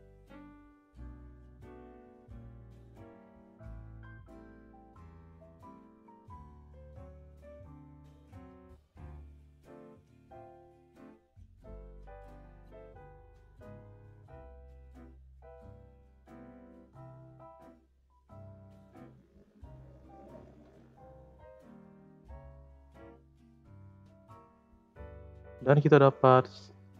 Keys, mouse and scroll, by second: 1.4 click, 2.8 click, 4.3-5.2 drag, 5.6 space, 6.3 space, 6.8-7.2 drag, 7.2 space, 8.8 space, 9.3-10.5 drag, 11.7 click, 12.8 click, 16.7 drag, 17.0 space, 17.7 space, 18.1-18.7 drag, 18.7 space, 20.4 space, 21.2-22.3 scroll down 2, 22.3 click, 23.1 click, 23.5-24.7 scroll up 4, 23.5-23.9 middle drag, 24.7 click, 26.4-26.9 drag.